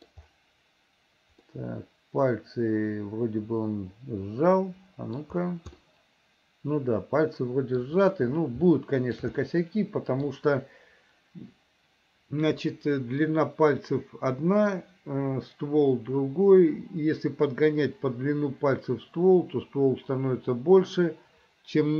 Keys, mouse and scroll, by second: 1.5-5.3 middle drag, 5.8-7.9 middle drag, 8.7 shift+middle click, 9.5 middle click.